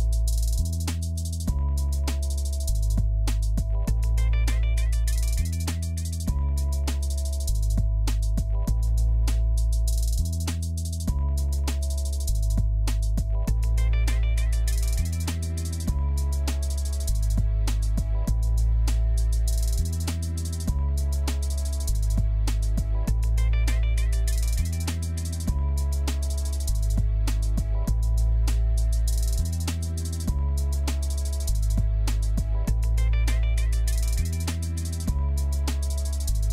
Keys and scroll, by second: 30.9-31.7 typing.